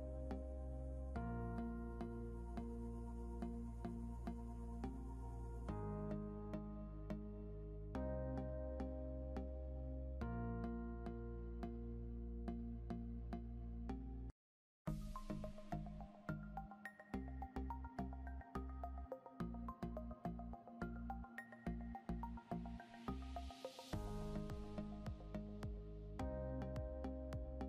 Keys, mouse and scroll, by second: 8.6 scroll down 1, 14.6 ctrl+z, 15.1 scroll down 1.